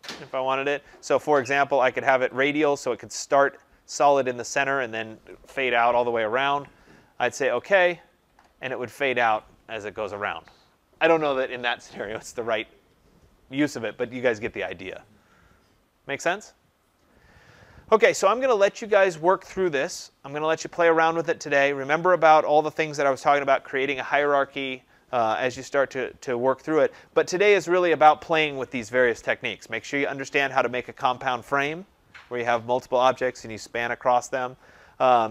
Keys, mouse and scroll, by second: 1.3 click, 2.3 click, 7.7 click, 12.7 click.